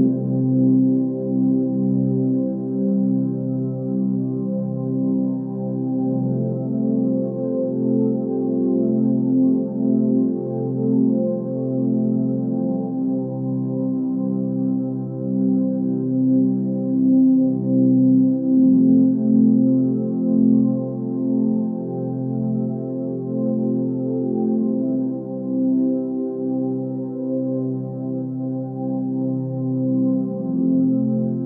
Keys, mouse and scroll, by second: 0.6-1.5 scroll up 2, 1.5 click, 5.2 g, 6.9 click, 7.7 g, 11.8 click, 12.3 g, 16.8 click, 17.2 g, 18.7 click, 19.0 g, 21.0 alt+click, 21.6 g, 22.8 click, 23.2 g, 23.9 click, 24.2 g, 25.2 click, 25.6 click, 25.9 g, 27.6 click, 28.1 click, 28.3 g, 29.3 g.